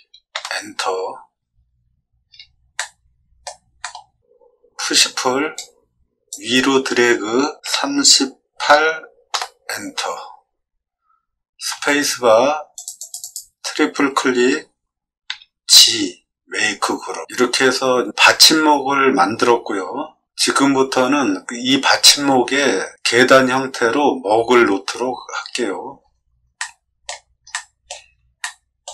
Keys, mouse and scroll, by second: 0.3 Return, 2.1 middle click, 2.1 scroll up 1, 2.7 middle click, 3.7 scroll up 2, 4.8 p, 5.5 click, 7.6 3, 8.6 8, 9.3 Return, 11.7 space, 12.7 click, 12.9 click, 13.2 click, 15.2 g, 25.9 middle click, 26.5 middle click, 27.4 middle click, 28.3 shift+middle click.